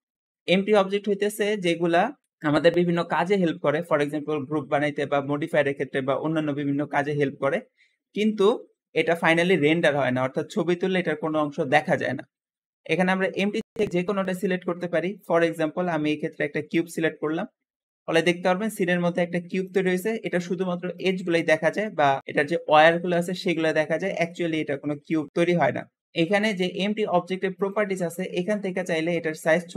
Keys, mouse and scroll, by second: 17.3-17.7 scroll down 3, 17.7-19.5 middle drag, 19.5 click, 19.9 middle click, 20.3-20.8 scroll up 2, 20.8 click, 21.1 g, 27.4-29.7 drag.